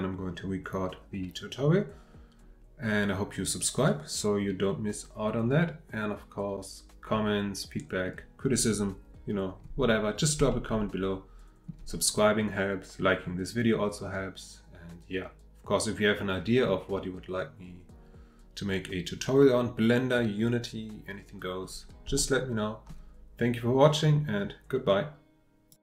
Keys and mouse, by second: 3.9-8.1 middle drag, 10.5-11.7 shift+middle drag, 11.8-14.0 drag, 16.6-21.6 middle drag, 22.2-22.9 shift+middle drag.